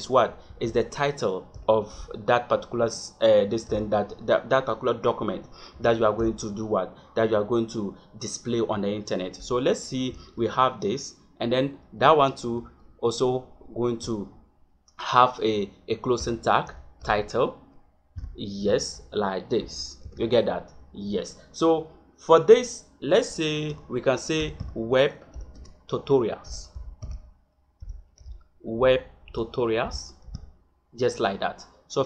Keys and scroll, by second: 0.4 shift+,, 1.5 t, 3.7 t, 6.1 e, 10.0 shift+., 12.5 shift+,, 16.1 t, 16.6 i, 17.0 t, 18.1 l, 18.5 e, 20.0 shift+., 23.6 Caps_Lock, 24.3 w, 25.6 space, 26.4 t, 26.7 u, 26.9 t, 29.2 a, 29.8 l, 30.3 s.